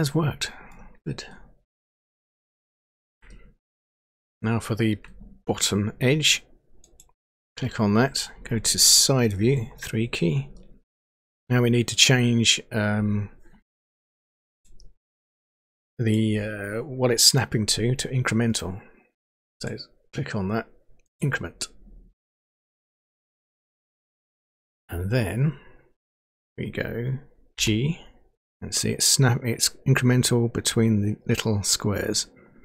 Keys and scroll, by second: 9.4 Page_Down, 27.6 g.